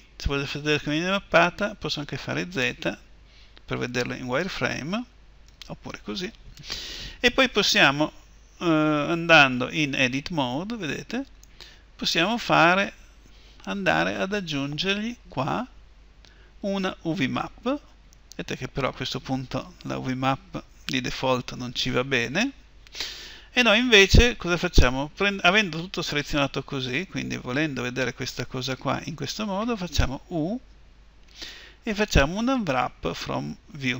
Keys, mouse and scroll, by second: 0.1 z, 1.9 z, 2.3 z, 5.2 z, 9.6 Tab, 17.2-33.9 drag.